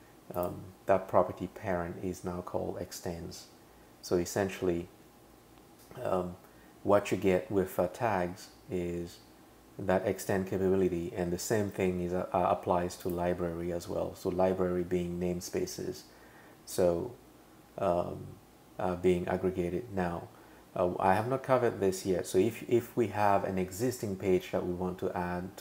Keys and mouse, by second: 0.4 click, 11.8 super+[, 13.0 click.